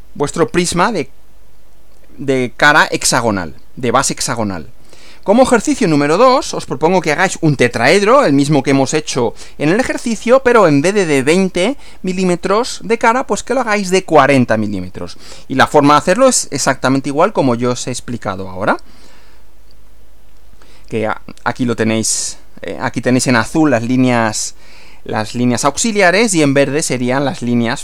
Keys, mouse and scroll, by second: 4.8 Right, 18.4 Right.